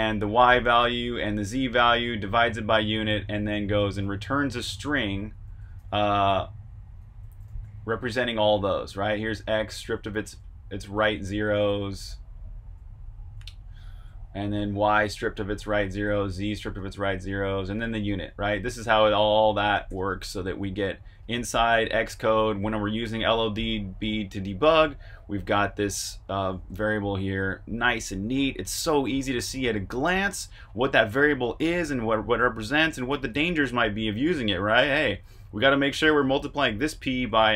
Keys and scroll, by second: 0.9-1.7 typing, 3.7-6.7 typing, 8.9-15.5 typing, 19.7-20.4 typing, 21.0 super+Tab.